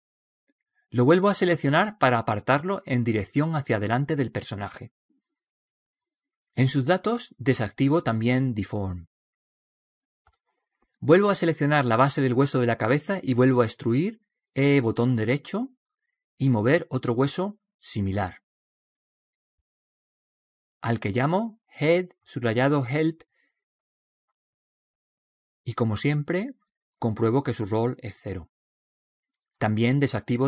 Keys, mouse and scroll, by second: 1.7 right click, 2.9 click, 5.7 click, 7.1-8.9 middle drag, 8.9-12.6 drag, 11.5 middle click, 12.8-14.0 middle drag, 14.0 right click, 14.9 e, 16.9 click, 19.1 right click, 21.5 click, 26.9-29.7 drag.